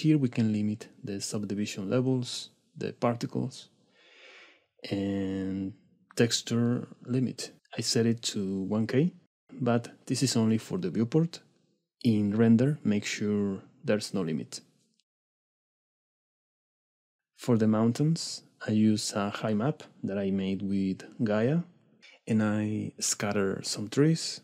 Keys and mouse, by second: 0.6-7.2 middle drag, 7.2-8.5 drag, 14.6-16.5 drag, 18.3 middle drag, 18.8 shift+middle click, 18.9 middle drag, 19.6 middle click, 22.9 middle click.